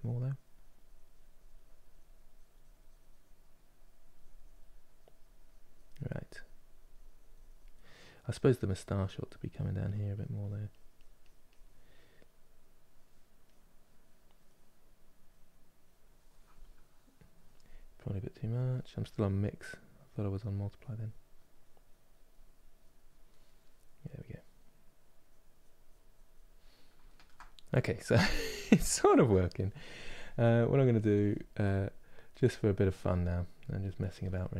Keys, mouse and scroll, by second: 18.8-26.8 drag, 26.8-33.5 ctrl+middle drag, 33.5 click, 34.0 ctrl+middle click.